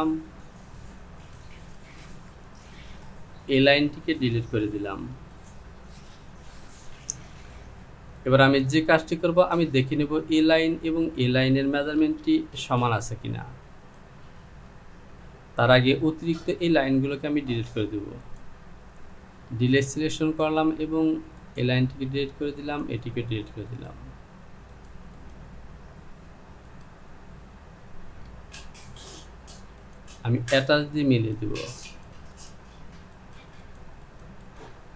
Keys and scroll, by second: 5.2 Delete, 12.0 Return, 19.7 Delete.